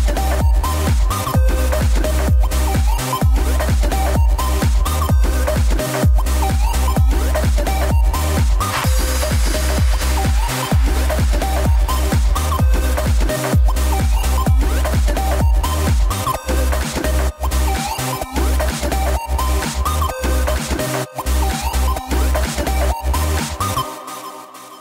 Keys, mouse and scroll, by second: 1.1 g, 1.9 r, 6.0 shift+d, 7.1 r, 9.1 g, 10.4 r, 12.0 g, 13.2 r, 15.4 g, 18.6 click, 19.8 KP_0, 21.7 KP_7, 23.3 shift+d.